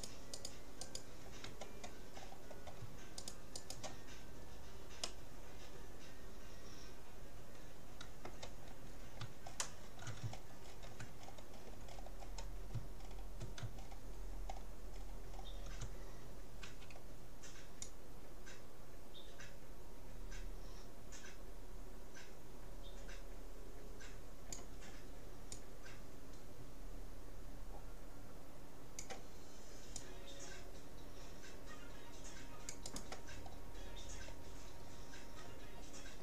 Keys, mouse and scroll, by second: 2.2-3.2 middle drag, 3.2-5.2 right drag, 5.0-6.8 middle drag, 8.9 middle click, 11.0-17.4 middle drag, 16.8 c, 33.4-36.2 middle drag.